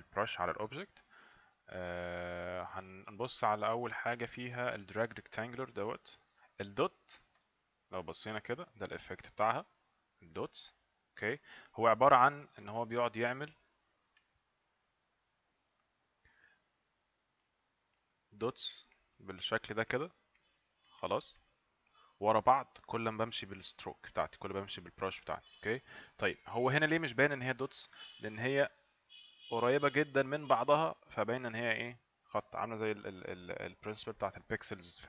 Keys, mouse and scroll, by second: 7.3 click, 10.1 click, 14.2 click, 28.5 click, 31.5 click.